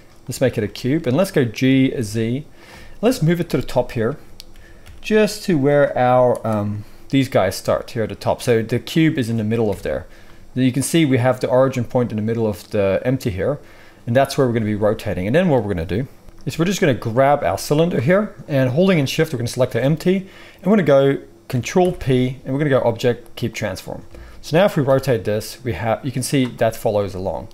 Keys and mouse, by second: 1.6 g, 2.6-6.3 middle drag, 3.0 KP_1, 4.5 g, 6.3 click, 6.4-8.9 middle drag, 8.9-9.6 drag, 9.6-17.0 middle drag, 9.6 KP_1, 16.2 g, 17.0 click, 17.4 g, 19.2 shift+click, 21.8 ctrl+p, 24.1 alt+a, 24.5 click, 24.8 r, 26.9 r.